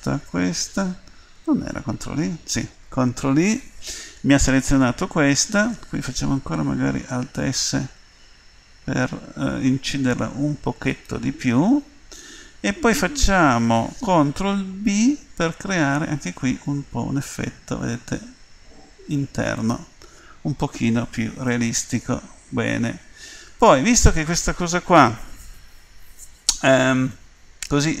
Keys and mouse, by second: 1.9 ctrl+i, 7.7 alt+s, 14.8 ctrl+b, 21.5-22.6 middle drag.